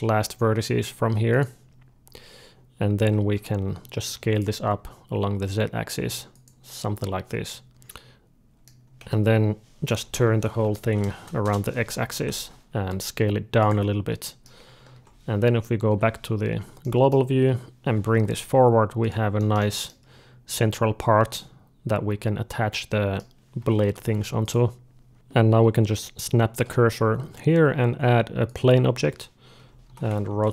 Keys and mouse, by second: 1.6 middle click, 2.8 a, 3.2 s, 7.6 click, 7.7 z, 7.9-9.8 middle drag, 8.8 a, 9.7 ., 10.2 r, 12.0 o, 12.6 s, 13.7 middle click, 14.8 Tab, 14.9 middle click, 15.7 KP_Divide, 15.9 middle click, 16.6-18.7 middle drag, 17.7 g, 19.4-23.4 middle drag, 23.4 g, 25.1-26.5 drag, 26.0 shift+s, 27.6 shift+a, 29.5 Tab, 29.7 r.